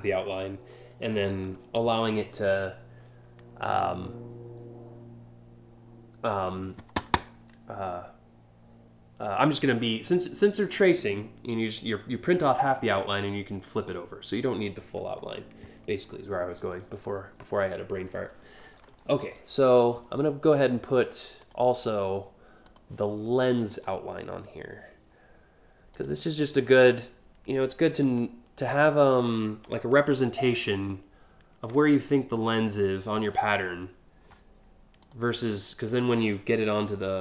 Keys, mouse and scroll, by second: 18.5 scroll up 1, 19.4 click, 21.1 click, 22.3 click, 23.3 click, 25.6 click, 28.5 click, 33.0 click, 34.7 click.